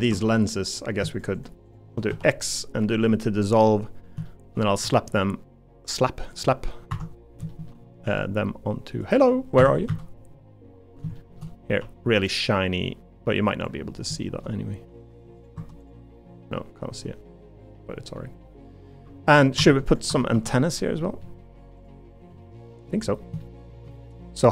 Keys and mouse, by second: 0.1 3, 2.1 x, 4.3 shift+middle click, 4.8 g, 7.6 shift+middle click, 8.0 g, 9.6 Escape, 9.9 a, 11.2 shift+middle click, 11.8 g, 14.3 shift+middle click, 15.5 Tab, 16.1-17.3 middle drag, 17.7 middle click, 18.4 middle click, 19.0 q, 20.1 Tab, 20.3 3, 21.0 middle click, 21.8 click, 22.3 middle click, 23.4 shift+middle click.